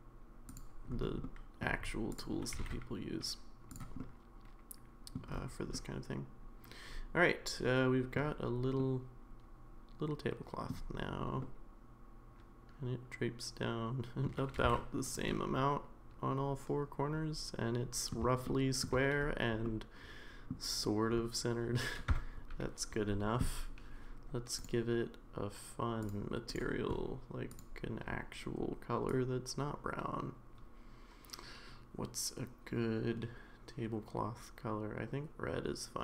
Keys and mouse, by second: 1.2 middle click, 2.5 g, 4.0-5.1 middle drag, 5.7-8.2 middle drag, 8.8-10.7 middle drag, 11.4-14.2 middle drag, 14.6 g, 15.3-18.1 middle drag, 18.4 shift+middle click, 19.6 middle click, 22.1 Tab, 24.7-26.1 drag, 26.5 click.